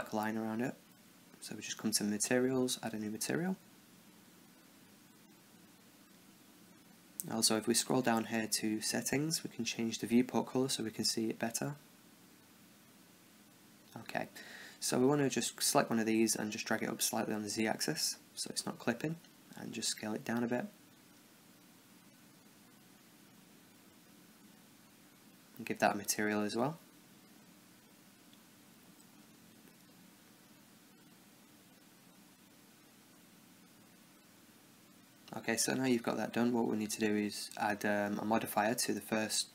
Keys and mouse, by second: 0.8 Tab, 2.0-8.0 drag, 7.3-11.1 middle drag, 9.0-11.7 drag, 12.6-14.1 middle drag, 14.1 click, 14.7 middle click, 15.4-17.2 right drag, 17.2 click, 19.0 s, 21.1-23.1 middle drag, 21.9 KP_0, 23.3-24.7 right drag, 24.7-25.8 middle drag, 25.8-33.1 drag, 35.4 t.